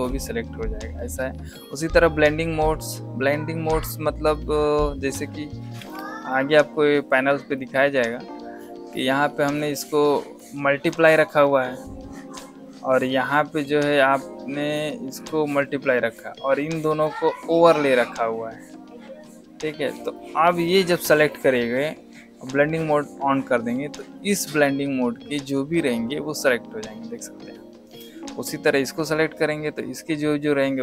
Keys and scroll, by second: 5.7 v.